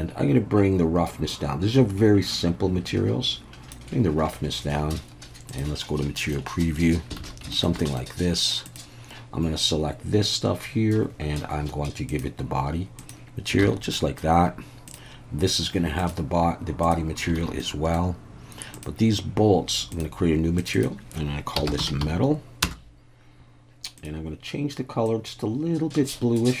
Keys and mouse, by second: 1.3-3.8 drag, 5.6-6.1 drag, 6.3-6.6 middle drag, 7.3 alt+a, 7.5 shift+middle click, 7.8 middle drag, 8.7-10.2 drag, 12.1 click, 13.6 alt+a, 13.9 middle click, 16.0 click, 17.4 alt+a, 17.6 middle click, 18.8-20.5 drag, 20.6 click, 20.7-23.2 drag, 24.0 drag.